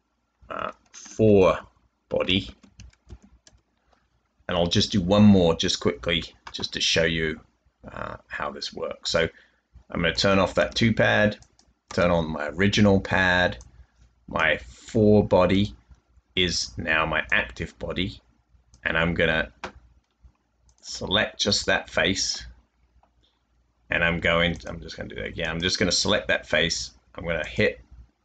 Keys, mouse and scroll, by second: 1.2-3.0 typing, 3.4 Return, 5.1 typing, 10.7 typing.